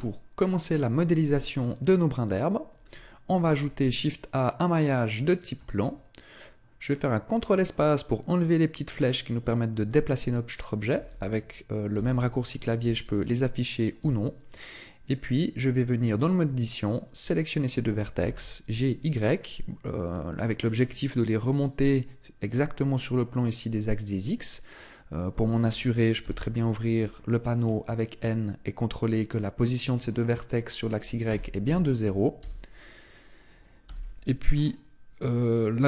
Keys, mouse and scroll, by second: 0.9-1.3 scroll up 5, 2.9-3.3 scroll up 1, 3.3 shift+a, 10.9 ctrl+space, 11.9 ctrl+space, 13.9 Tab, 15.1 right click, 16.1 shift+right click, 18.1 g, 20.7 click, 27.1-27.6 scroll up 1, 27.6-28.1 scroll up 9, 28.1-29.7 scroll up 5, 30.0 click, 30.0 scroll up 1, 33.8 n, 34.5-35.5 scroll up 1.